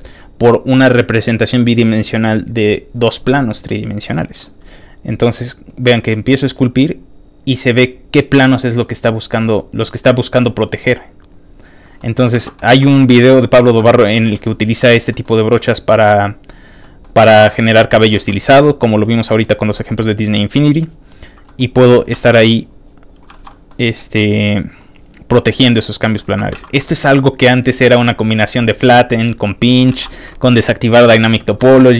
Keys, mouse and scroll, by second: 4.1 middle click, 5.6-11.7 drag, 12.0 middle click, 12.3 ctrl+z, 12.7 shift+f, 13.4 click, 13.6 shift+middle click, 14.0 shift+f, 14.1 click, 14.3 middle click, 14.8 f, 14.9 click, 15.1 middle click, 15.8 click, 16.8 middle click, 17.2 click, 17.7 middle click, 18.1 shift+middle click, 18.5 click, 19.0 click, 19.3 click, 19.7 middle click, 20.1 click, 20.5 click, 20.8 click, 21.1 click, 21.4 middle click, 21.8 ctrl+z, 22.2 ctrl+click, 22.4 ctrl+click, 22.8 ctrl+click, 23.0 ctrl+click, 23.3 ctrl+shift+middle click, 23.5 ctrl+middle click, 24.0 click, 24.4 click, 24.9 click, 25.3 click, 25.7 click, 26.0 click, 26.3 shift+middle click, 26.5 ctrl+shift+z, 26.9 click, 27.5 click, 28.0 middle click, 28.4 click, 28.7 click, 29.2 click, 29.9 ctrl+z, 30.1 click, 31.6 middle click, 31.9 middle click, 31.9 scroll down 1.